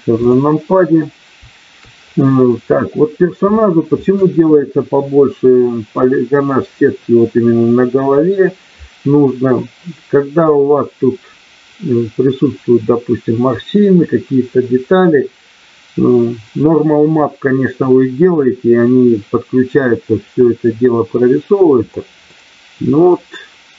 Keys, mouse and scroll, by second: 0.1 click, 22.2-23.7 middle drag.